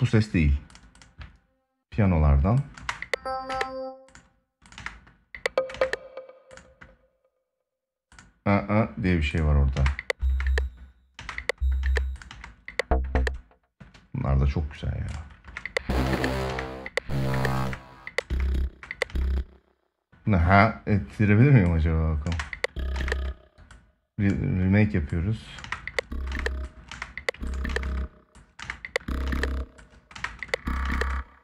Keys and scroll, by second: 2.5 space, 4.5 space, 9.4 space, 15.1 space, 22.0 space, 25.4 space, 27.4 space.